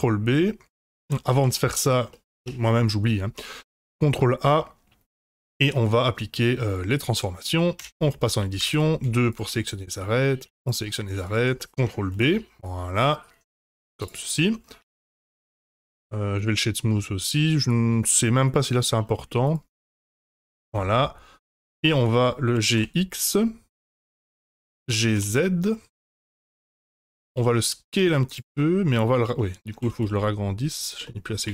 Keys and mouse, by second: 1.3 ctrl+z, 2.1 middle click, 2.4 Tab, 3.7 ctrl+a, 7.1 middle drag, 7.7 Tab, 8.5 2, 9.3 shift+click, 9.6 middle click, 11.2 shift+click, 11.5 middle click, 12.1 ctrl+b, 14.2 click, 14.8 Tab, 15.3-16.4 middle drag, 18.6 click, 20.6 KP_Divide, 21.9-22.2 middle drag, 22.5 g, 24.3-24.7 middle drag, 24.9 g, 27.3 s, 28.6-28.9 middle drag, 29.3 middle drag, 29.8 g, 31.0 middle click, 31.4 s.